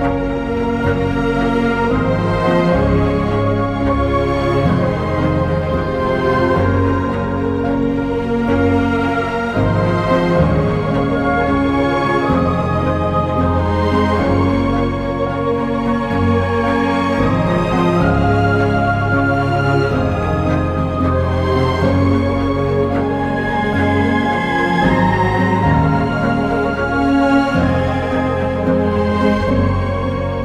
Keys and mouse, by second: 1.1 j, 3.2 click, 3.7 shift+click, 4.7 j, 8.2 k, 9.4 click, 10.1 click, 10.7 Return, 12.1 shift+click, 13.3 k, 14.0 Escape, 14.7 j, 15.1 2, 16.0 shift+click, 16.5 ctrl+x, 20.2 ctrl+x, 21.6 ctrl+x, 22.5 1, 24.0 j, 24.4 click, 24.9 shift+click, 25.8 j.